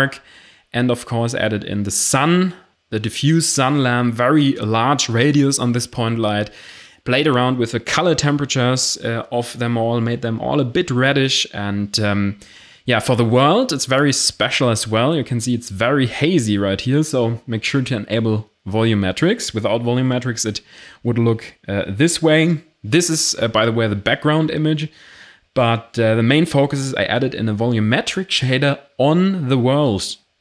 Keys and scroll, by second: 2.4 o, 21.5 g.